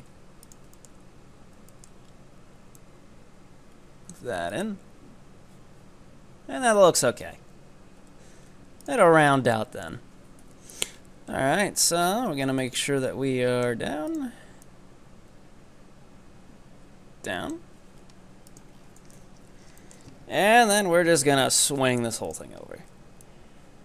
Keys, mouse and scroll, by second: 0.5 right click, 0.8-2.8 shift+middle drag, 2.8-4.6 drag, 4.6 right click, 7.3 Tab, 8.0 Tab, 8.9 ctrl+right click, 9.1 scroll down 2, 9.6 shift+middle click, 10.4 KP_3, 10.9 scroll down 1, 11.0-11.9 scroll up 7, 11.9 z, 12.7-14.1 drag, 14.1 right click, 14.7-17.8 drag, 17.8 z, 18.5 ctrl+right click, 18.8 scroll down 7, 19.2 KP_7, 19.8 shift+middle click, 20.2-20.6 scroll up 2, 20.6 e, 22.3 right click, 22.6 z, 23.3-23.8 drag.